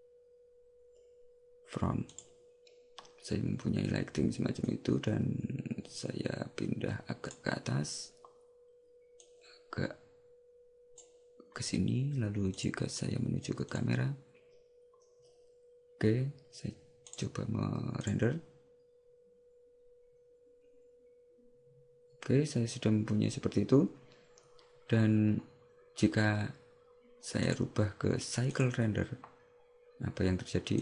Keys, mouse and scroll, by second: 4.8 click, 9.3 click, 12.6 click, 17.2 click.